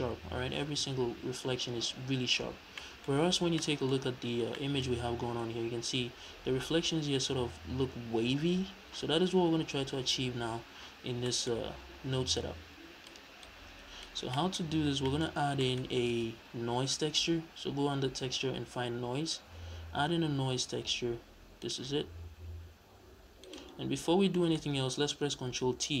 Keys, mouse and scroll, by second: 2.7 middle click, 3.0-3.5 scroll up 1, 3.5 middle click, 5.4-5.9 scroll up 1, 5.9 scroll down 1, 10.9-11.2 scroll down 2, 11.2-11.5 middle drag, 11.5-12.3 scroll up 2, 12.3 click, 13.3 click, 14.3 middle click, 14.6-15.0 scroll up 2, 15.0-15.3 middle drag, 15.3 scroll down 1, 15.8-16.1 scroll up 1, 16.1 shift+a, 21.6 click, 22.8 click, 23.7-24.3 scroll up 2, 24.1-26.0 middle drag.